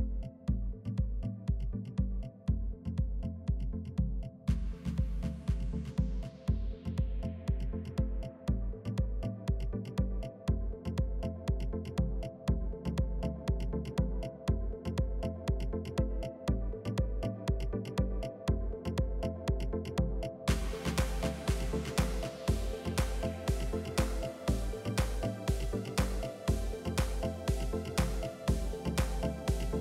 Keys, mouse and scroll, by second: 0.0 Tab, 0.4 click, 1.9 shift+a, 2.5 s, 3.2 g, 4.5 s, 7.0 g, 8.3-8.8 drag, 9.0-10.6 middle drag, 12.0 click, 12.7 s, 13.9-14.5 middle drag, 14.5 KP_3, 14.7 KP_1, 17.4 click, 17.6 scroll up 2, 17.8-18.1 scroll down 2, 18.1 Tab, 18.7 ctrl+r, 20.4 click, 20.8 s, 21.3-22.4 middle drag, 22.4 i, 23.2 KP_3, 24.3 ctrl+r, 25.8 ctrl+r, 27.6 scroll up 2, 27.9 shift+middle click, 28.7 click.